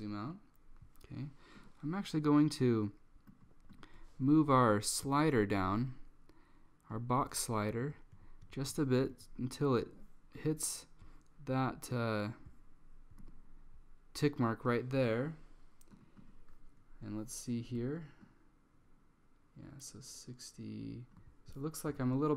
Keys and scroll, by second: 7.9 Down, 8.2 Down, 8.5 Down, 8.8 Down, 9.2 Down.